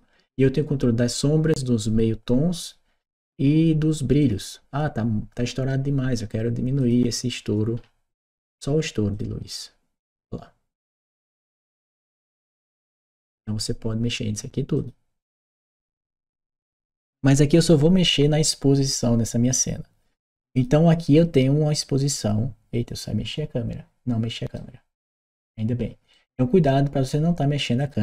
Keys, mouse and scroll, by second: 4.0 click, 6.6 click, 8.2 click, 8.9-13.2 drag, 14.6 click, 16.7 click, 20.3 click, 20.9-24.3 right drag, 25.9-27.6 right drag, 27.6 click.